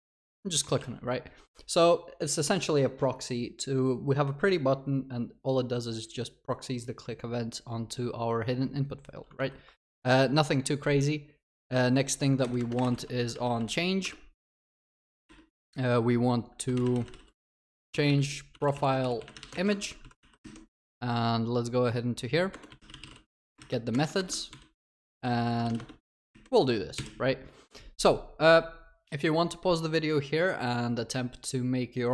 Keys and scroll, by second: 9.4 ctrl+s, 14.6 ctrl+BackSpace, 19.9 ctrl+w, 20.0 ctrl+c, 24.5 ctrl+v.